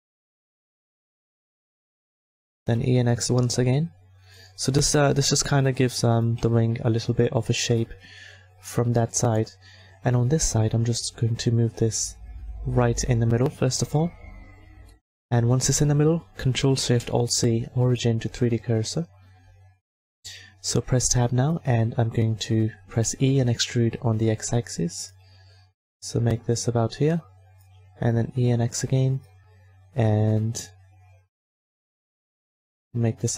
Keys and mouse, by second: 1.6 e, 2.8 s, 5.1-6.7 drag, 6.4 Tab, 10.2-13.7 middle drag, 14.2 middle click, 19.2-20.5 ctrl+alt+drag, 20.2 Tab, 23.0 e, 25.4 s, 28.0 e, 29.7 s, 32.9-33.3 middle drag.